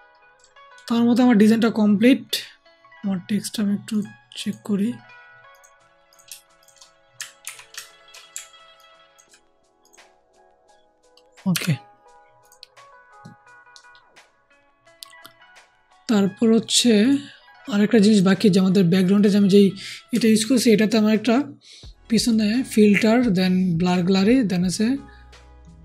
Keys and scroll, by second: 7.3 ctrl+shift+t, 11.4 Down.